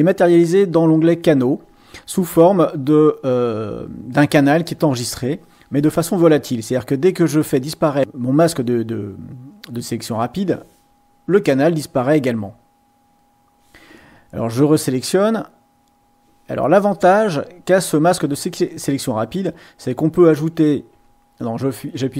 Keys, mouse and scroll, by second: 1.0 click, 15.1 click, 19.8 click, 21.0 x.